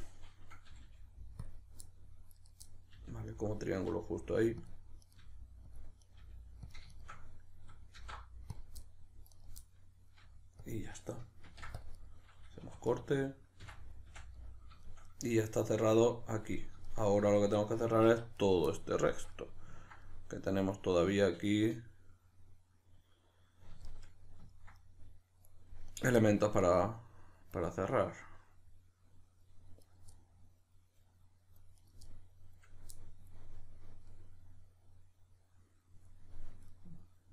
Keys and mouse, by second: 0.7 g, 1.4 click, 1.8 middle click, 2.4 right click, 2.6 middle click, 2.9 g, 3.4 click, 3.6 right click, 3.8 g, 4.7 click, 5.1 right click, 5.2 g, 5.7 click, 6.0 right click, 6.2 g, 6.7 click, 6.9 shift+right click, 8.0 alt+m, 8.9-9.3 middle drag, 9.3 right click, 9.7-12.9 middle drag, 10.2 g, 10.7 click, 11.5 ctrl+r, 12.1 right click, 12.7 2, 12.9 right click, 13.0-18.4 middle drag, 13.7 f, 18.1 1, 18.4 right click, 18.7-25.9 middle drag, 25.9 right click, 26.2-29.8 middle drag, 29.8 right click, 30.1-31.8 middle drag, 31.8 right click, 32.0-37.3 middle drag.